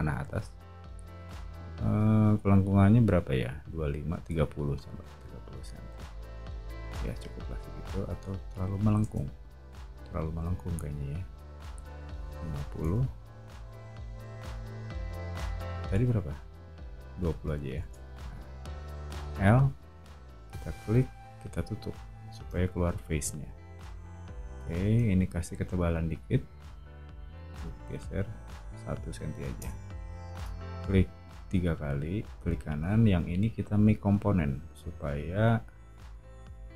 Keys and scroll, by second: 0.1 scroll up 2, 4.4-5.4 typing, 5.4 Return, 9.0 super+z, 12.1-13.1 typing, 14.8 scroll up 2, 17.3 typing, 17.8 Return, 18.9-20.2 typing, 22.4-24.3 typing, 26.4 p, 28.9 1, 29.6 Return, 30.3 space, 34.8 o.